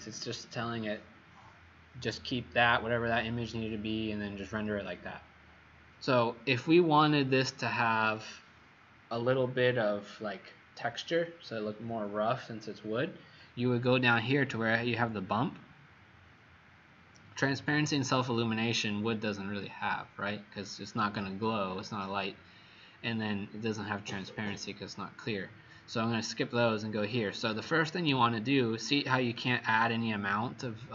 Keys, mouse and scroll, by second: 29.4 click.